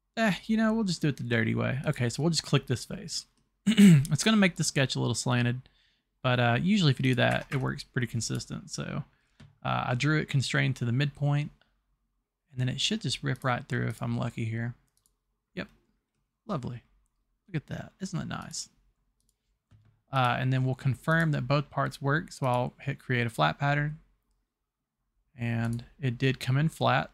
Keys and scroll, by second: 7.4 Escape, 7.5 Escape.